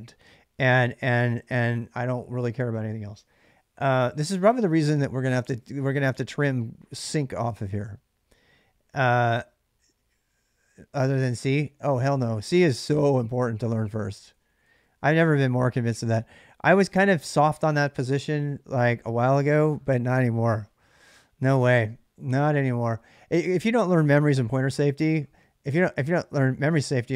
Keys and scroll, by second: 0.7-3.1 typing, 14.1 j, 14.2 j.